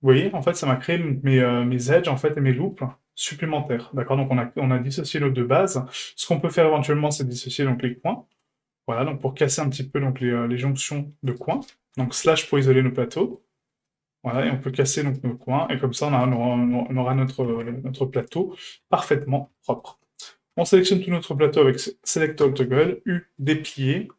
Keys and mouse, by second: 1.3 middle click, 1.9 ctrl+middle click, 3.1 shift+middle click, 5.9 right click, 7.1 middle click, 7.8 shift+middle click, 10.2 shift+middle click, 11.3 shift+right click, 11.9 KP_Divide, 12.5 middle click, 13.1 middle click, 13.8 middle click, 15.1 shift+right click, 15.4 middle click, 16.2 shift+right click, 16.5 middle click, 17.5 ctrl+e, 18.8 a, 19.2 click, 19.5 a, 22.4 a, 22.4 u.